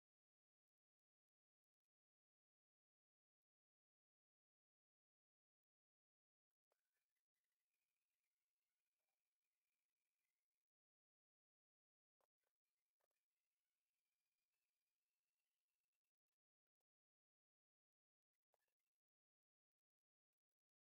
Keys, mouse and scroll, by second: 0.9-2.5 drag, 2.8 scroll down 2, 3.1 shift+middle click, 3.4 scroll up 1, 3.7 shift+middle click, 5.2 click, 6.6 g, 10.8 click, 11.0 scroll down 1, 11.2-11.6 scroll up 1, 11.6 click, 12.1 g, 12.9 g, 14.7 click, 14.9-15.7 scroll up 3, 15.7-16.4 scroll down 5, 16.7 shift+a, 17.7-18.4 scroll up 6, 18.4 g, 20.4 Delete, 20.8-20.9 scroll down 6.